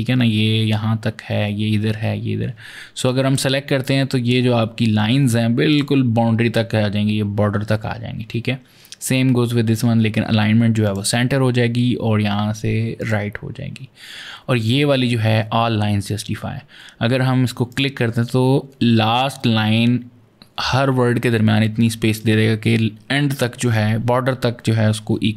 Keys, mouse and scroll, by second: 2.9 click, 5.5 click, 10.7 click, 12.8 click, 17.5 click.